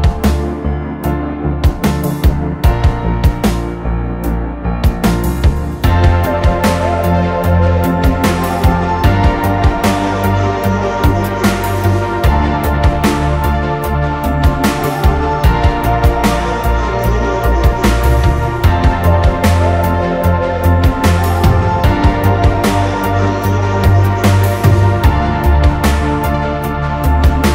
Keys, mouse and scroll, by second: 2.4 double click.